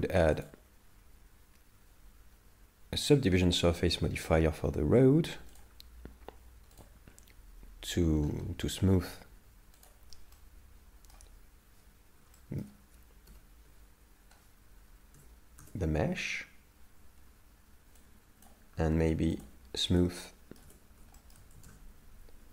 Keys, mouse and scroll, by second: 0.4 click, 0.4 scroll up 5, 4.1 scroll down 2, 5.6 click, 5.6-6.2 scroll down 14, 8.3 scroll up 1, 9.8 click, 9.8 scroll up 11, 10.4 middle click, 12.4 shift+middle click.